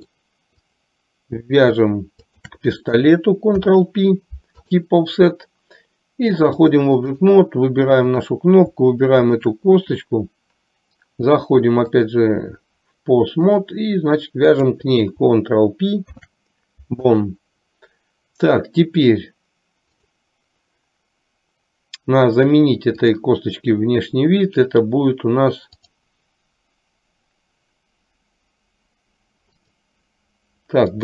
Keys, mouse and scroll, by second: 0.8 click, 3.5 ctrl+p, 6.7 click, 8.2 click, 12.0-13.9 drag, 14.7 click, 16.2 ctrl+p, 23.2 click, 25.9 click, 29.8 click.